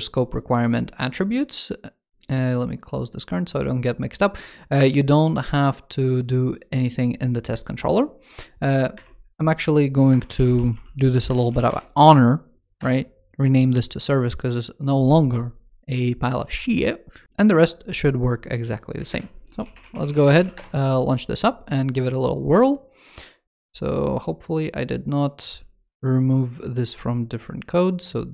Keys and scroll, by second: 18.8 ctrl+super+space, 23.4 super+2.